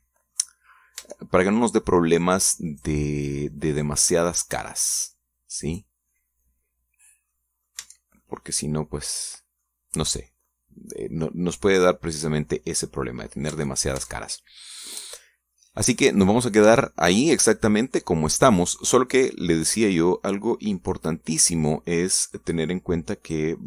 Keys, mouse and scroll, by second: 1.8-2.1 scroll up 1, 2.2 Tab, 2.5 middle click, 2.8 click, 3.9 right click, 4.7-5.9 drag, 6.8 right click, 8.5 middle click, 9.0 Tab, 9.4 middle click, 10.1 click, 11.5-14.3 middle drag, 14.5 scroll up 1, 14.7 Tab, 15.5 scroll down 1, 15.8-17.6 middle drag, 19.3 scroll down 1, 19.8 scroll up 2, 20.2 scroll down 2, 20.6-22.1 middle drag, 22.2 middle click, 23.5-23.6 drag.